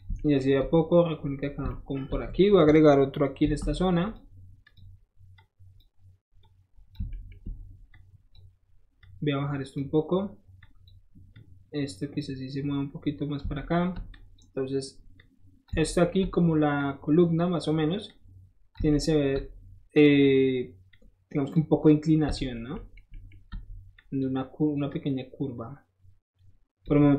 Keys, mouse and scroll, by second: 0.4-1.7 shift+middle drag, 2.0 shift+middle click, 3.4 ctrl+shift+r, 4.0 click, 4.6 click, 5.3 click, 6.4 click, 7.1 shift+middle click, 7.9 shift+click, 9.0 shift+click, 10.6 click, 11.3 click, 13.5 shift+middle click, 14.1 shift+click, 15.2 shift+click, 15.8 shift+middle click, 16.8 shift+click, 18.1 shift+click, 19.2 shift+middle click, 19.9 shift+click, 20.2 shift+middle click, 20.9 shift+click, 22.4 shift+middle click, 22.7 shift+middle click, 23.1 shift+middle click, 23.4 shift+middle click, 24.0 shift+click, 24.9-26.9 shift+drag.